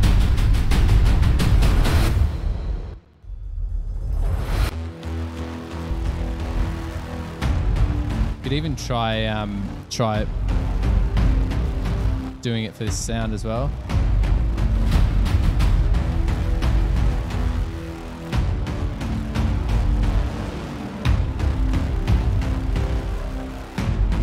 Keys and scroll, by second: 3.0 space, 3.2 space.